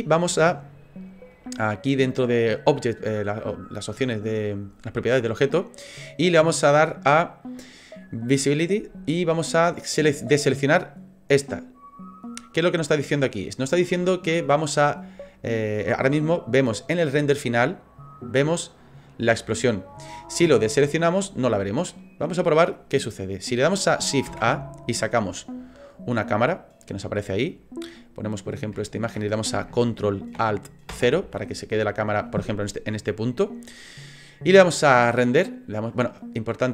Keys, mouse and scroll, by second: 5.4 click, 8.7 click, 24.3 shift+a, 27.9 middle click, 28.8 shift+middle click, 30.9 ctrl+alt+KP_0, 35.1 click.